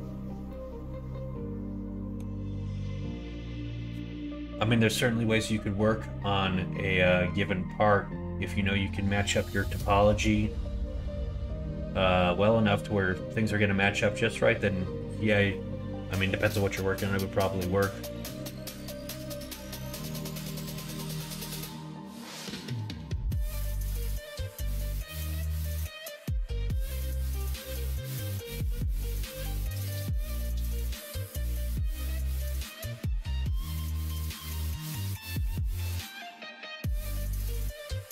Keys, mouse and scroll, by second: 0.5-2.2 middle drag, 19.8 middle click, 19.9 scroll down 1, 20.4 middle click, 20.6-21.0 scroll down 2, 20.8 shift+middle click, 21.2 middle click, 21.5 middle click, 22.0 shift+middle click, 22.4 middle click, 23.1-24.8 middle drag, 25.8 2, 27.3 middle click, 29.1 click, 30.7 middle click, 31.1 middle click, 31.6 g, 35.5 Tab, 36.0 middle click, 36.2 Tab, 38.0 x.